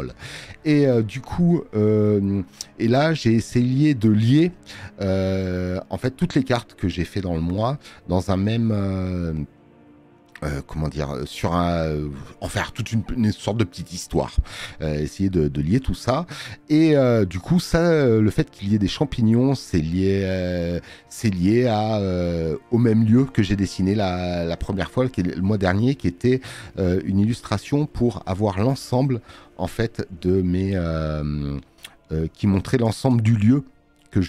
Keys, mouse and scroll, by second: 4.4 space, 4.6 click, 20.2 click, 23.9 click, 23.9 space.